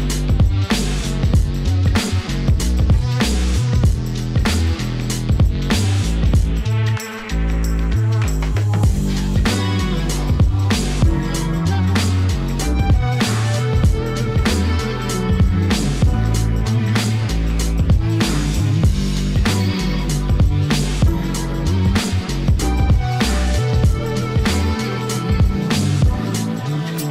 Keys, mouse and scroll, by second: 1.6 click, 1.9-3.4 ctrl+drag, 3.6 Tab, 4.8 click, 5.8 alt+a, 7.1 click, 7.5 shift+click, 8.9 ctrl+z, 9.8 shift+click, 9.9 shift+click, 12.1 g, 12.4 z, 13.4 click, 16.4-17.5 drag, 18.0 Tab, 19.6-20.2 drag, 20.6-20.9 drag, 20.6-21.9 typing, 21.7 click, 24.9 click, 25.2-27.1 ctrl+drag.